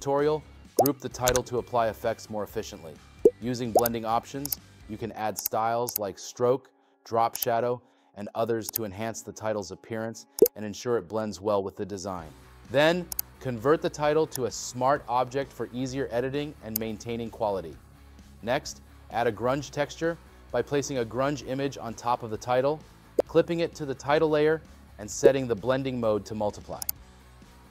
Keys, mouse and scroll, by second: 17.8 space, 22.5 right click.